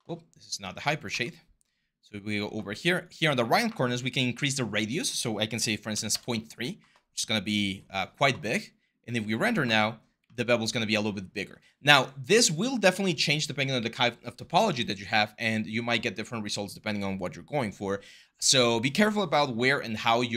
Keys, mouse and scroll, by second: 5.7 3, 5.9 Return.